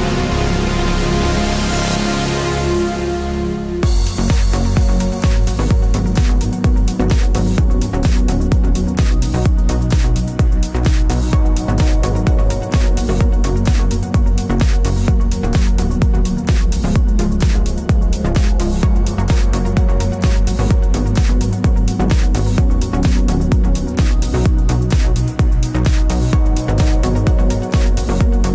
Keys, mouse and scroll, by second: 0.7 s, 0.9 KP_Enter, 1.2 middle click, 2.4 shift+click, 2.8 f, 3.2 middle click, 3.7 click, 3.8-7.4 middle drag, 4.5 Tab, 5.3 Tab, 7.4 click, 8.1 f, 8.3-11.7 middle drag, 8.6 KP_7, 9.0 z, 9.2-9.5 scroll up 2, 9.5-9.9 scroll down 2, 9.9 ctrl+r, 11.7 click, 12.0 s, 12.6 Escape, 12.7 ctrl+z, 13.4 k, 17.0 Return, 17.6 k, 19.2 Return, 19.8 k, 22.2 Return, 22.6 k, 24.8 Return, 25.5 ctrl+r, 26.4 click, 26.7 middle click, 27.0 3, 27.2 click, 27.9 shift+click.